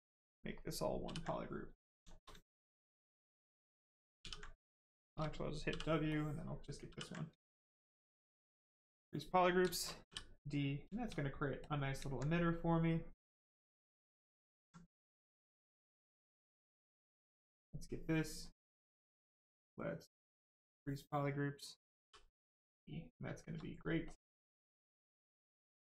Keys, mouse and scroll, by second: 1.0 ctrl+w, 1.3 right click, 2.0 shift+right click, 2.6 ctrl+click, 4.2 ctrl+w, 4.5 right click, 4.9 shift+right click, 5.7 ctrl+w, 6.1 ctrl+click, 6.9 ctrl+w, 7.1 right click, 8.9 click, 9.4 right click, 9.6 shift+right click, 12.1 alt+right click, 12.9 right click, 12.9 right click, 14.2 alt+click, 16.7 click, 17.2 right click, 20.5 click, 22.0 d, 22.3 right click, 24.0 shift+click, 24.7 right click.